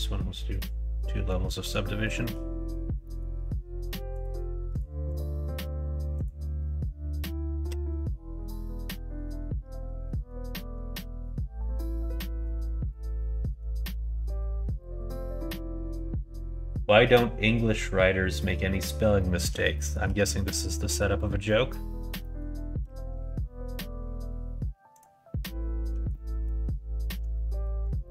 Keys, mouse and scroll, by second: 0.5 click, 1.2 middle click, 1.9 shift+middle click, 2.9 middle click, 4.7 click, 6.0 click, 8.5 click, 9.1 middle click, 10.0 middle click, 11.1-12.4 shift+middle drag, 13.1 middle click, 13.9 shift+middle click, 14.4 middle click, 19.1 middle click, 19.6 shift+middle click, 20.1 middle click, 20.7 middle click, 22.2 middle click, 22.7 q, 26.0 middle click, 27.2 shift+middle click, 27.9 middle click.